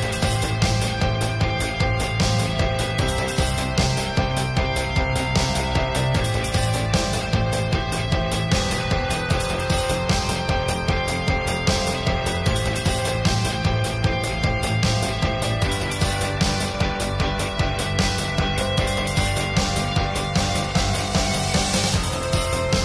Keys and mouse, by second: 0.5 click, 0.7 ctrl+s, 2.6 ctrl+s, 3.5 ctrl+s, 8.0 ctrl+s, 8.4 ctrl+s, 9.1 KP_0, 9.6 ctrl+s, 10.1 KP_7, 11.7 shift+a, 12.5-12.9 drag, 12.9 KP_1, 13.2 click, 13.6 r, 14.4 KP_7, 14.7-15.8 drag, 14.9 r, 16.0 click, 17.5 KP_1, 17.9-18.9 drag, 18.7 r, 19.4-20.0 middle drag, 19.9 r, 20.2-20.9 middle drag, 20.9-22.4 drag.